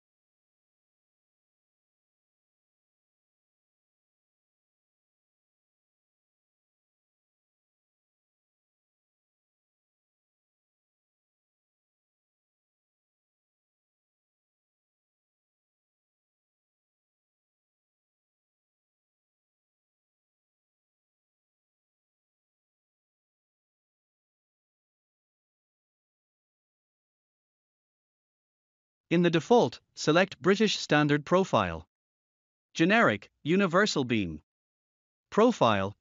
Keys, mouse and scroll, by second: 1.7-3.7 typing, 5.4 click, 7.1 click, 9.0 click, 11.6-13.0 typing, 14.1 1, 15.9 click, 18.5 click, 20.0 click, 20.8-23.9 typing, 26.0 click, 29.2 click, 29.7-31.3 scroll up 1, 31.6 click, 33.5-34.5 scroll up 1, 34.5 click.